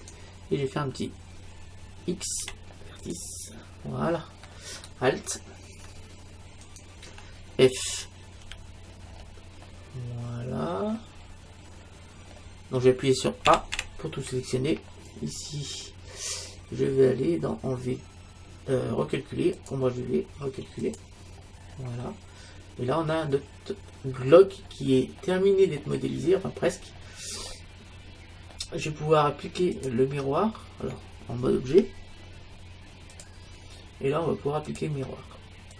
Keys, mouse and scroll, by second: 2.4 x, 3.8-5.6 middle drag, 6.7-8.6 right drag, 8.5 f, 9.7-16.9 middle drag, 13.5 a, 13.8 a, 19.6-22.6 drag, 22.0-24.0 middle drag, 24.6-25.2 scroll down 1, 25.2-29.4 middle drag, 29.8-31.7 drag, 31.7 Tab, 34.8-35.7 drag.